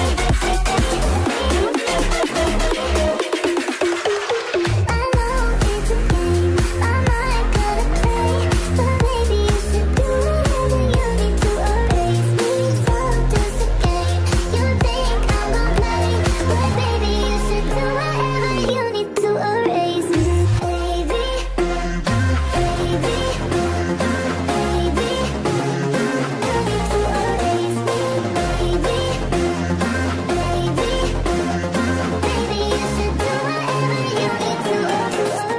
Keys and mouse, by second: 0.0 KP_3, 2.0 n, 2.9 ctrl+Tab, 3.7 click, 4.3 click, 4.7 click, 7.8 click, 10.3 click, 11.8 a, 14.3 i, 16.2-35.5 drag, 19.0 i, 20.7 n, 21.5 Right, 21.6 Right, 21.7-22.4 Right, 22.8 Right, 22.8 Right, 23.0 Right, 23.1 Right, 29.3 i, 30.0-30.8 Right, 32.0 Right, 33.9 i, 34.7 space.